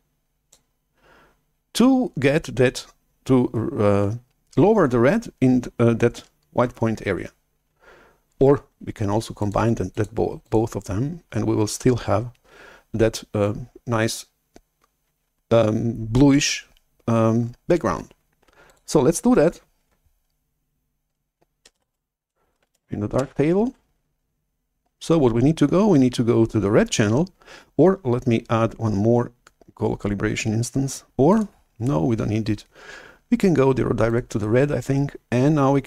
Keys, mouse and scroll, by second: 9.4-13.0 drag, 18.7-21.2 drag, 21.8 shift+super+F11, 22.6 alt+Tab, 23.9 shift+super+F11, 23.9 alt+Tab, 31.3 click, 31.8-33.8 drag, 34.1-35.0 drag.